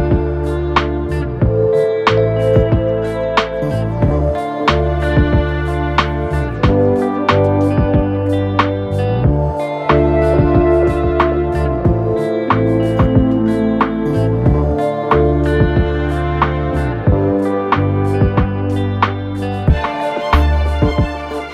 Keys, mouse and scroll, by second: 1.1 t, 5.9-6.6 typing, 21.4-21.5 typing.